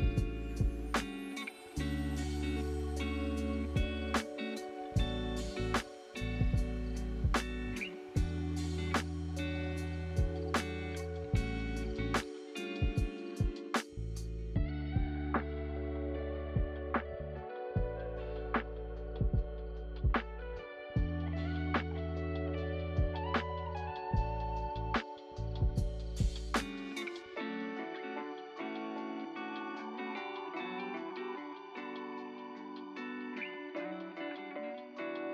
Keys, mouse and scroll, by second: 2.2 click, 5.2 click, 6.8 click, 7.0-8.6 middle drag, 8.6 scroll up 1, 8.8-9.4 scroll down 5, 9.4-9.8 scroll up 1, 10.0-13.1 middle drag, 13.1 scroll up 2, 13.9-14.3 scroll up 1, 14.3-14.8 scroll down 2, 15.6 click, 16.2 ctrl+c, 16.4 ctrl+v, 17.3 middle click, 18.2 click, 22.1-23.2 right drag, 23.2 click, 23.6 click, 25.0 BackSpace, 25.6 click, 27.0 Delete, 28.6 click, 29.1 middle click, 29.7 scroll down 1, 30.0 scroll up 3, 31.4 shift+middle click, 32.3 click, 35.0 click.